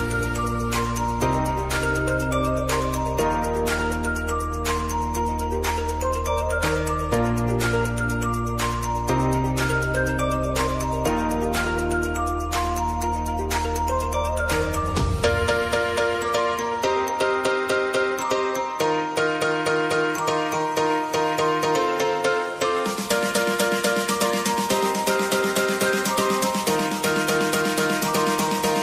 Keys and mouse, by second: 6.7-8.1 drag, 8.3 space, 12.8 space, 13.6 click, 15.3 space, 19.8 space, 21.4 click, 22.4-22.9 typing, 27.6 click.